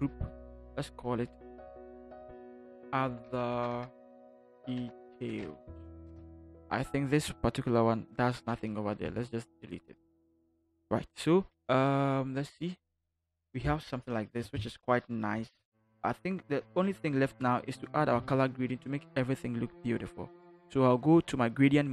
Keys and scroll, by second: 1.2 ctrl+shift+g, 2.6-6.1 typing, 9.0 Delete, 12.4 ctrl+0.